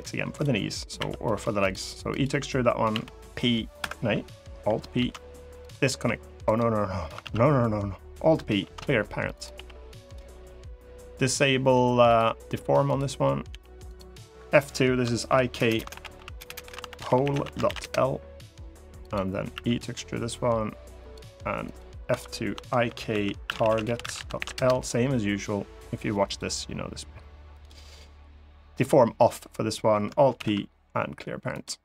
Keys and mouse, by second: 0.7 e, 1.3 click, 2.6 p, 4.7 alt+p, 5.6 g, 6.2 right click, 6.9 ctrl+z, 8.3 alt+p, 9.3 g, 9.8 click, 11.8 click, 12.6 click, 13.2 g, 13.6 click, 14.1 F2, 15.5 BackSpace, 16.3 shift+BackSpace, 18.8 click, 19.3 e, 20.7 click, 21.5 click, 21.8 F2, 26.0 click, 27.3 click, 30.1 alt+p, 31.6 middle click.